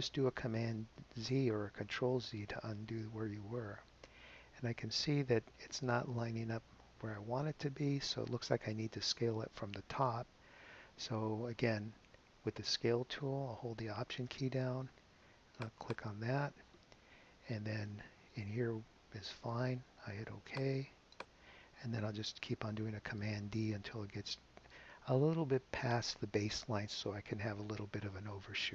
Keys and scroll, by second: 0.8 super+z, 5.6 super+z, 24.1 super+d.